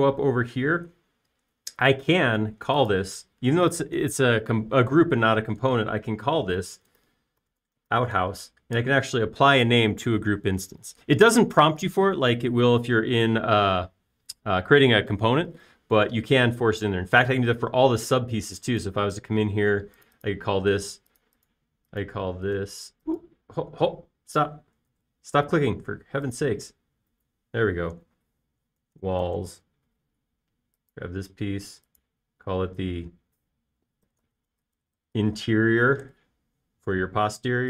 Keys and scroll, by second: 7.6-10.0 typing, 10.1 Return, 26.3 super+z, 29.9-31.2 typing, 35.2-36.8 typing, 37.1 Return.